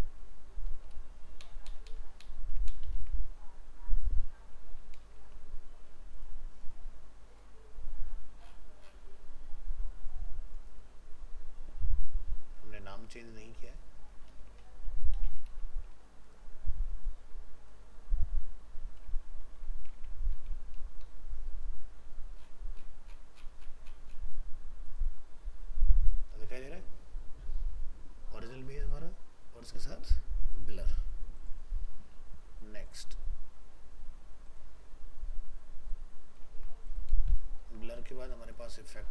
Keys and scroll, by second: 1.4 ctrl+BackSpace, 2.9 ctrl+s, 14.3 alt+移, 15.1 ctrl+c, 19.2 ctrl+v, 19.9 alt+Tab, 36.5 ctrl+c, 37.3 ctrl+v, 37.6 ctrl+s.